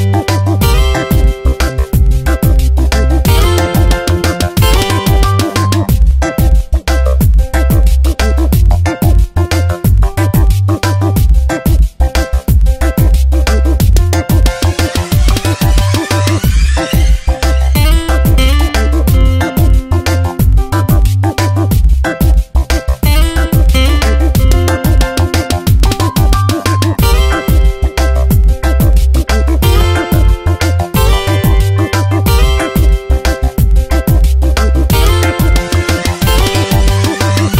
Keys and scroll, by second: 12.1 Return, 13.5 space, 20.7 ctrl+t, 22.6 Return, 23.3 Left, 23.6 Down, 23.9 Tab, 33.4 ctrl+alt+g.